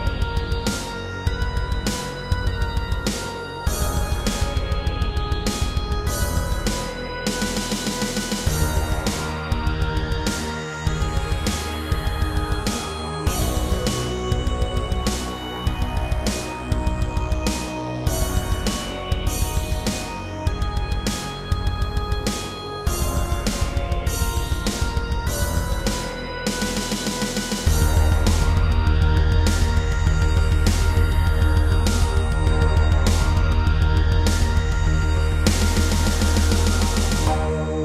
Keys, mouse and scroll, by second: 0.3 scroll up 1, 1.1 middle click, 1.8 b, 2.3 click, 3.7 middle click, 4.6-5.0 scroll up 3, 5.1 middle click, 5.6 b, 5.9 click, 7.4 middle click, 8.4 7, 9.5 scroll down 3, 10.2 typing, 11.6 t, 12.3 y, 15.1 click, 15.5 middle click, 16.0 scroll up 2, 16.3 middle click, 18.0 click, 19.5 alt+click, 20.0 middle click, 22.1 click, 24.2 shift+middle click, 24.7 middle click, 25.2 g, 25.3 g, 26.0 click, 26.3 scroll down 2, 26.6 middle click, 28.5 ctrl+z, 29.1 middle click, 30.0 typing, 31.3 middle click, 32.9 middle click, 33.4 typing, 34.1 click, 34.4 scroll up 2, 34.8 shift+middle click, 35.1-35.7 scroll up 2, 35.8 shift+middle click.